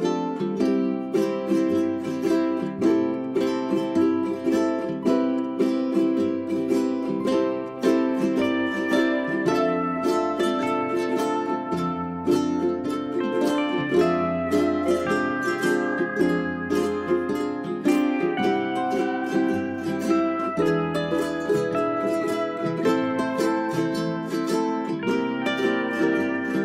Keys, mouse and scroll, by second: 4.2 ctrl+z, 4.6 click, 7.5 shift+click, 8.2 click, 11.1 right click, 12.0 click, 12.4 Delete, 12.6 right click, 13.3-20.5 drag, 20.5 z, 20.8-21.3 scroll down 1, 21.3-24.5 drag, 24.5 right click, 25.3 click.